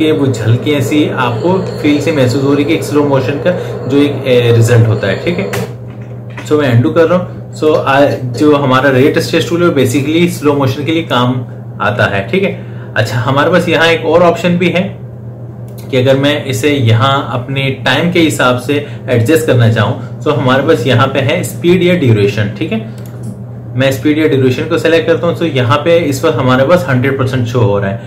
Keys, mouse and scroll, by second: 5.3 space, 6.1 ctrl+z, 7.5-15.5 drag, 15.5 right click, 22.8 click.